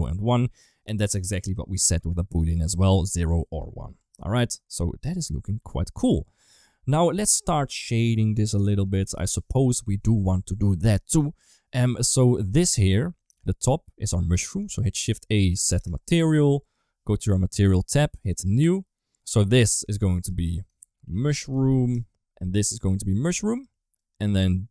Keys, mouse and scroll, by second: 3.9 Tab, 4.3 middle click, 5.5 ctrl+s, 5.8 middle click, 11.8 middle click, 12.5 click, 12.7 click, 14.7 shift+a, 17.5 click, 18.0 click, 19.9-21.7 drag, 22.5-23.5 drag, 23.9 click.